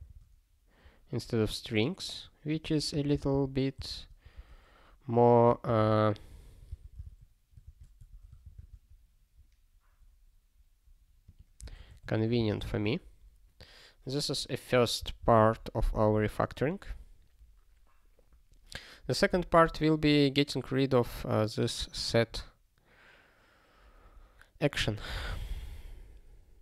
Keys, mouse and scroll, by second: 0.0 ctrl+s, 1.4 scroll down 1, 2.6 click, 2.9 ctrl+n, 3.1 ctrl+b, 3.3 ctrl+b, 4.2 BackSpace, 4.3 ', 5.6 ctrl+alt+f, 6.7 ctrl+d, 7.0 ctrl+s, 7.6 ctrl+=, 8.0 Tab, 8.5 ctrl+s, 11.3 click, 11.8 ctrl+alt+@, 12.0 Tab, 12.5 ctrl+s, 15.3 ctrl+s, 20.0 click, 20.1 double click, 21.5 click, 22.3 click, 24.8 click.